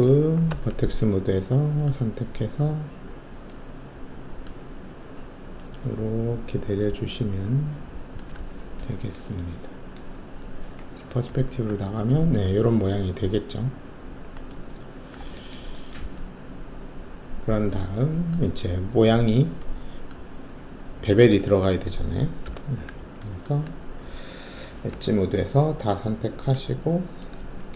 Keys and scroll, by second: 0.5 alt+1, 10.8 alt+shift+q, 11.7 alt+`, 22.4 alt+5, 24.8 alt+2.